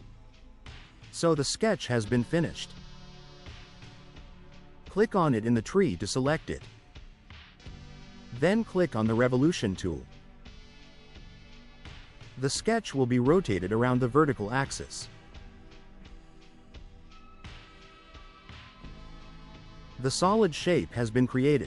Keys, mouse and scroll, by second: 0.7 middle click, 1.7 click, 2.2 right click, 5.4 click, 9.9 click, 17.5 click.